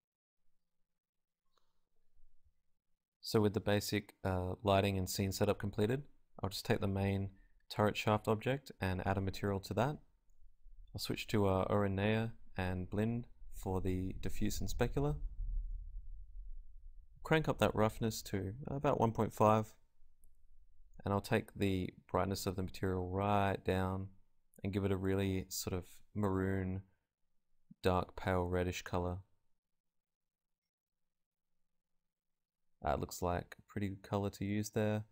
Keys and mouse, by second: 2.4 click, 3.1 g, 4.1 click, 5.2-11.8 drag, 12.3-19.1 drag, 34.8 z.